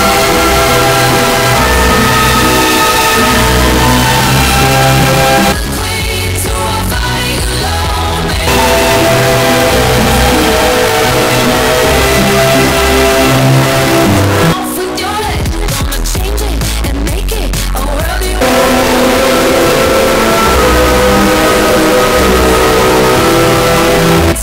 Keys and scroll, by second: 5.6 Page_Down, 14.6 Page_Down, 24.3 space.